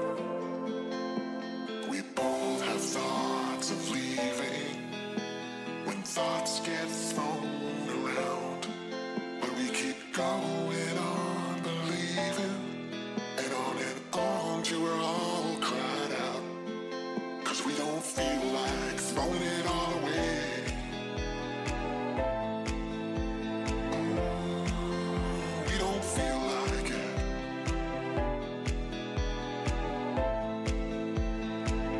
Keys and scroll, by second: 8.5 ctrl+z, 9.3 ctrl+shift+z, 25.0 ctrl+z, 29.0 ctrl+z.